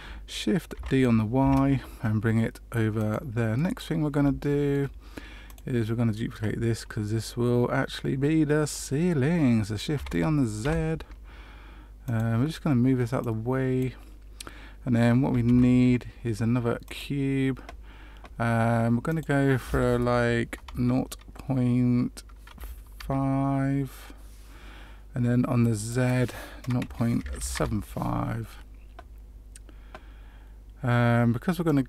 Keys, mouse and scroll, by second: 0.7 shift+d, 3.5 middle click, 4.4 shift+middle click, 5.4 click, 9.9 shift+d, 13.1 click, 15.4 shift+a, 19.0 click, 25.8 click, 31.6 click.